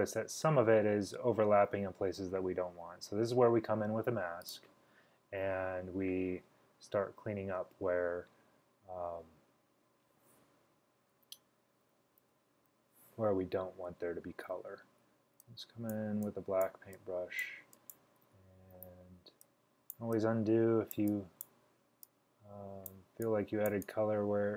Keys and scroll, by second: 11.9-12.7 typing, 18.8 super+z.